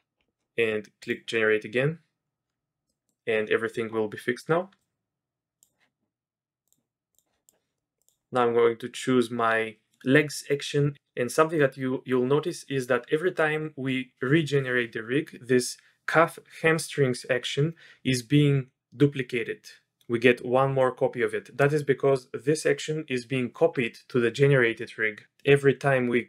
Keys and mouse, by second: 2.9 middle drag, 4.8-5.6 drag, 6.7 click, 7.1 click, 7.4 click, 8.0-26.2 drag.